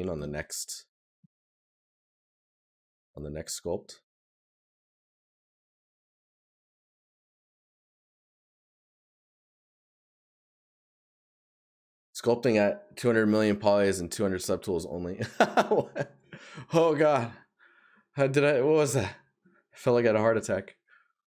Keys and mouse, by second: 0.6 right click, 4.9 right click, 15.4 right click.